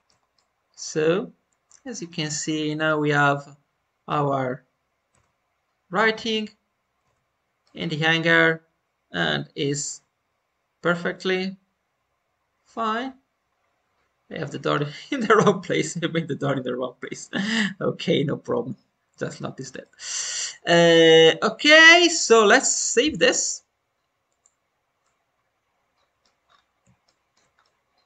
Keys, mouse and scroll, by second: 0.0 scroll down 2, 0.3-4.0 middle drag, 5.1 shift+middle click, 7.5-19.3 middle drag, 13.5 scroll down 1, 19.3 scroll up 1, 19.7-22.3 shift+middle drag, 23.0-24.9 drag, 24.9-26.4 middle drag, 26.4-26.7 scroll up 1, 27.0 shift+middle click, 27.4 scroll up 1, 27.5-28.0 middle drag.